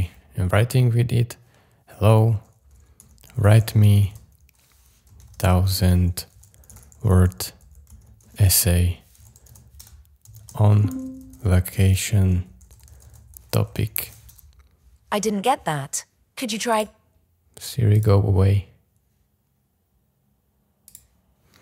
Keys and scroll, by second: 2.8-14.5 typing.